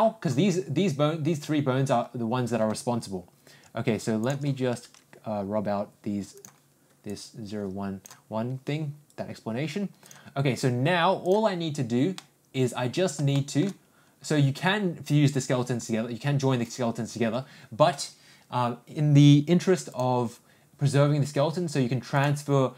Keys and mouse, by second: 12.2-13.1 middle drag, 13.3 shift+middle click, 19.8-22.3 drag.